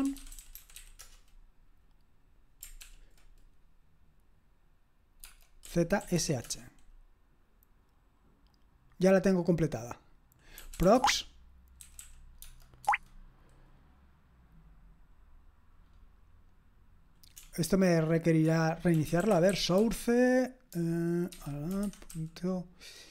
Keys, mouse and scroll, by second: 0.0-1.3 typing, 2.8 ctrl+p, 5.4-6.6 typing, 10.3-12.9 typing, 17.4-20.1 typing, 21.3-22.1 typing.